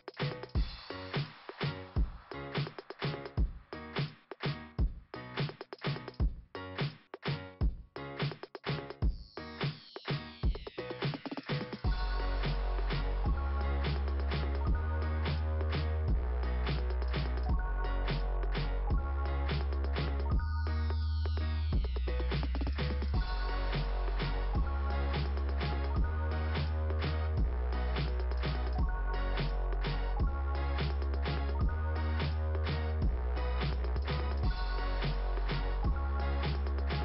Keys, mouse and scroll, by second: 0.2 click, 0.2 click, 1.7 click, 1.8 click, 6.3 click, 6.7 click, 6.9 click, 7.0 click, 7.2 click, 7.3 click, 7.5 click, 7.7 click, 7.8 click, 8.0 click, 8.3 click, 8.5 click, 8.6 click, 8.8 click, 8.9 click, 10.5 click, 10.7 right click, 12.5 click, 13.2-14.5 scroll down 1, 14.5-15.4 scroll down 1, 15.9-16.3 scroll up 1, 16.3 scroll down 1, 16.4 scroll up 1, 16.5 scroll down 1, 18.5-19.7 scroll up 3, 20.0 scroll up 1, 20.7 scroll up 1, 22.2-23.3 scroll up 1, 24.1-25.2 scroll up 1, 27.1 click, 27.3 click, 32.7 click, 33.0 click, 33.1 click, 33.2 click, 33.6 click, 33.7 click, 33.8 click, 33.9 click, 34.6 click, 35.1 right click, 35.8 click.